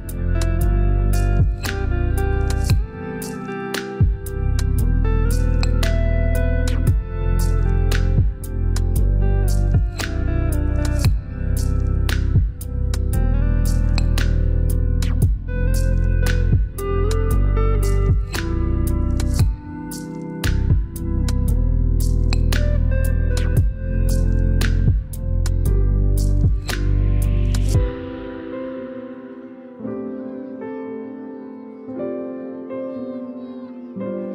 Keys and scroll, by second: 6.2 5.